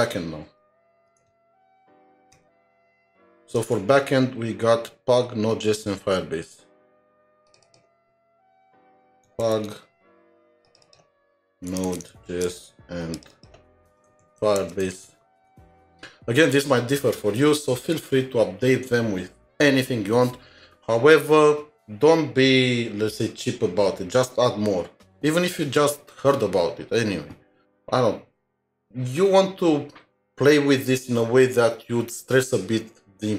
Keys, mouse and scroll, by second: 2.0 BackSpace, 3.6 BackSpace, 3.6 alt+Tab, 6.0 alt+Tab, 7.6 double click, 9.2-15.6 typing, 10.8 double click, 13.3 double click, 15.6 alt+Tab.